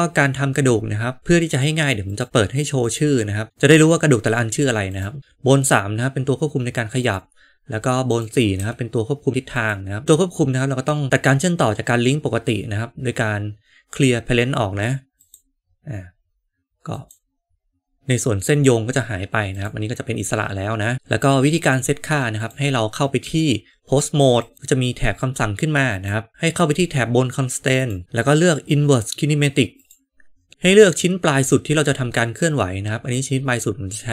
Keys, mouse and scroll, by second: 2.1 click, 2.7 click, 4.8 click, 8.0 click, 8.5 g, 17.0-19.5 right drag, 22.4 click, 23.1 Tab, 27.7 click, 28.0-29.8 drag.